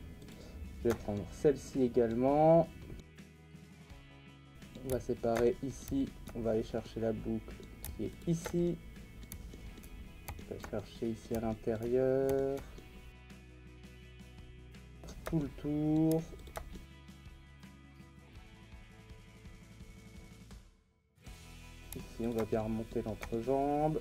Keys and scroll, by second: 17.3 ctrl+e, 18.5 ctrl+z, 18.6 ctrl+z, 20.1 ctrl+e.